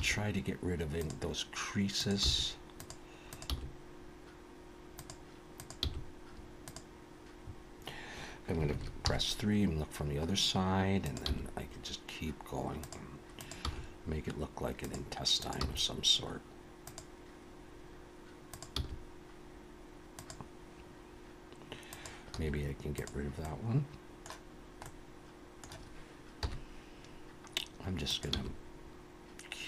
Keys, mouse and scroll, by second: 0.0 g, 1.9 click, 2.3 g, 3.3 click, 3.5 g, 5.6 click, 5.8 g, 8.7 alt+a, 9.0 KP_3, 11.0 click, 11.3 g, 13.4 click, 13.6 g, 15.3 click, 15.6 g, 17.8-18.4 scroll up 2, 18.5 click, 18.8 g, 21.9 click, 22.3 x, 23.4 middle click, 24.9 middle click, 26.4 KP_1, 28.0 click, 28.3 g.